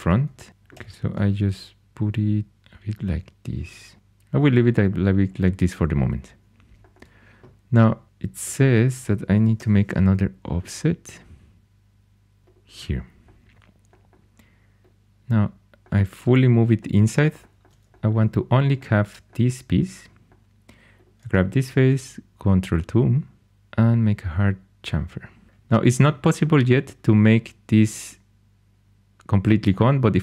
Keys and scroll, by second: 0.7 g, 8.4 3, 9.5 o, 21.6 ctrl+2.